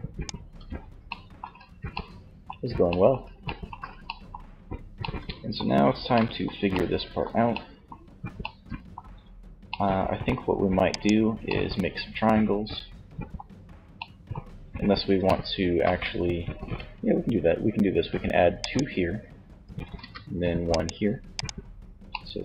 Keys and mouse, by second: 0.0 middle click, 0.4 z, 10.0-11.7 middle drag, 15.6 ctrl+r, 17.8-19.6 drag, 19.1 ctrl+r, 20.5-22.2 drag.